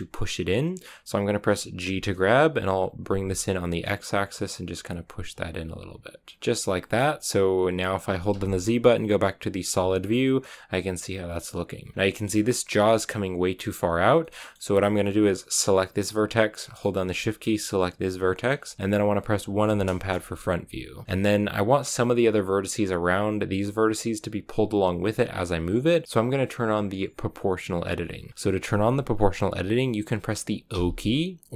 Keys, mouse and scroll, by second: 1.8 g, 6.4 g, 6.8 scroll down 2, 9.6 z, 9.9 scroll down 1, 10.1-11.9 middle drag, 11.9 scroll up 3, 12.0-14.9 middle drag, 14.9-15.6 scroll up 1, 15.6 right click, 16.5-17.7 middle drag, 17.7-19.5 shift+right drag, 19.5 KP_1, 24.9 g, 30.6 o.